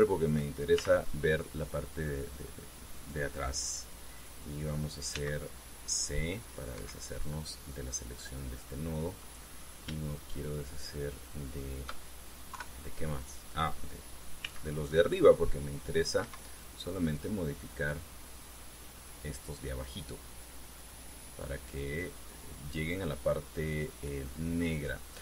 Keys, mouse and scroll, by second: 0.4 shift+middle click, 1.5 shift+z, 5.9 c, 6.3 click, 6.5-7.6 middle drag, 7.5 Escape, 10.0 middle click, 13.2 KP_3, 15.2 c, 15.6-17.0 middle drag, 17.0 Escape, 18.6-20.8 drag, 21.5-23.7 drag, 24.4-25.2 drag.